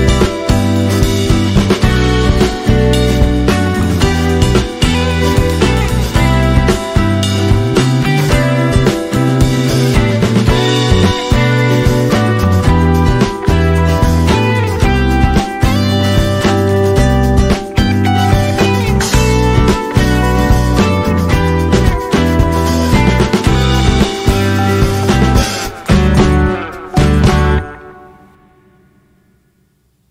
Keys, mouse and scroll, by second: 0.4 click, 11.1 alt+scroll up 1, 13.1 space, 14.9 click, 15.3 space, 16.5 alt+scroll down 1, 18.4-21.1 drag, 21.1 alt+scroll up 1, 23.6-27.6 drag.